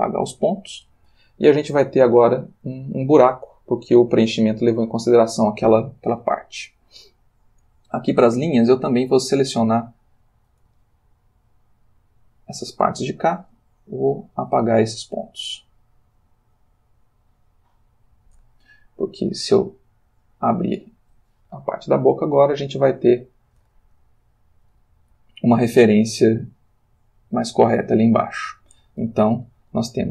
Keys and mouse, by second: 1.9 click, 9.2-10.0 drag, 11.0-12.3 shift+drag, 13.5 Delete, 13.9 click, 15.1 click, 16.2 Delete, 16.9 click, 20.2 click, 22.1-23.7 ctrl+middle drag, 26.9 click, 27.8 click, 29.9 Left.